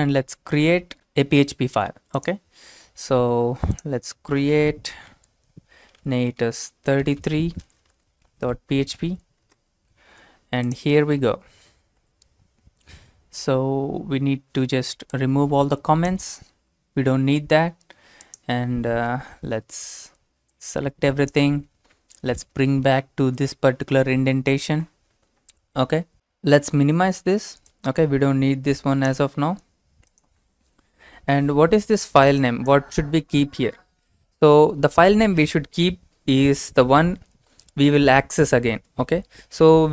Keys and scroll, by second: 5.7-9.4 typing, 11.1 ctrl+v, 16.9 BackSpace, 22.4 shift+Tab, 22.9 shift+Tab.